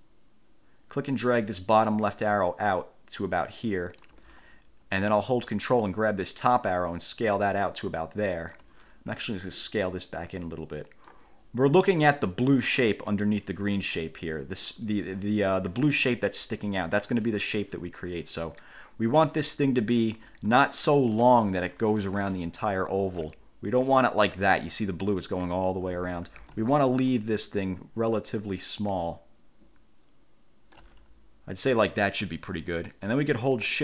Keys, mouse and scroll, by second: 6.5-8.9 ctrl+drag, 9.7 ctrl+click, 11.6 ctrl+scroll up 2, 24.0 ctrl+click, 26.6 ctrl+z, 27.8 ctrl+click.